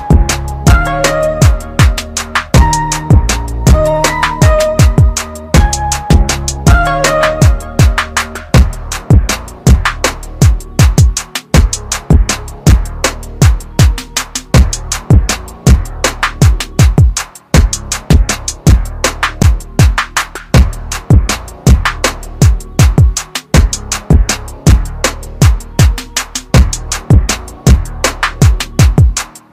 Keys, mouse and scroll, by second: 3.6 click, 5.8-7.6 scroll up 1, 7.6 click, 12.7 scroll down 1, 16.3 click, 18.1 shift+click, 19.1 shift+click, 19.6 shift+click, 20.7 click, 21.5 click, 23.1 click, 25.9 click, 26.5 click, 27.1 click, 27.8 click, 28.3 shift+click, 29.1 shift+click.